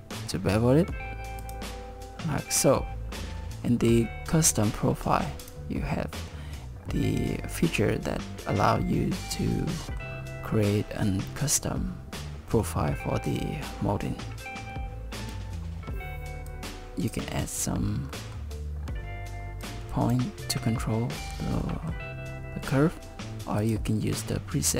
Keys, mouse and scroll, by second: 5.4 click, 9.5 middle click, 15.3 click, 15.9 click, 16.5 click, 18.1 middle click, 19.6 click, 21.6 middle click, 23.6 click.